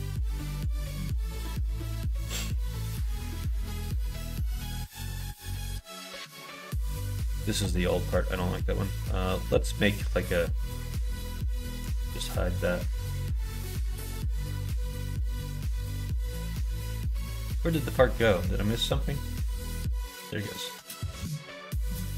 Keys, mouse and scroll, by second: 2.2 click, 3.1 middle click, 3.3 middle click, 3.9 click, 4.2 middle click, 5.0-6.2 middle drag, 7.7 middle click, 11.8 h, 15.1-19.0 middle drag, 19.9 click, 20.6 click.